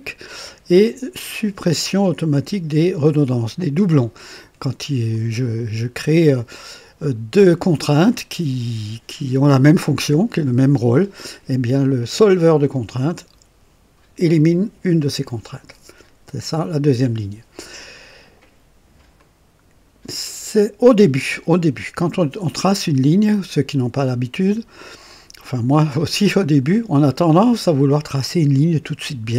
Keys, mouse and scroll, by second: 5.0 click, 19.1-20.1 right drag, 20.3 right click, 22.7-28.0 drag.